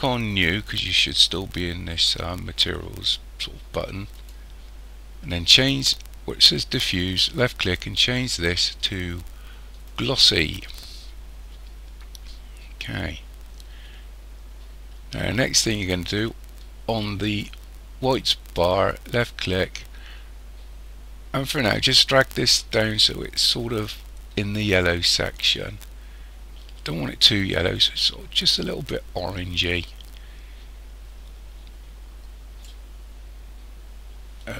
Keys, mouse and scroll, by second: 4.2 click, 7.7 click, 19.0 click.